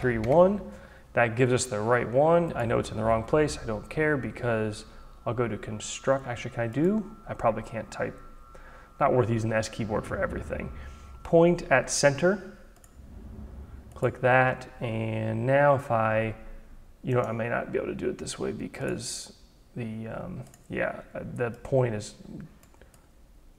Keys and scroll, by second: 0.0-0.7 typing.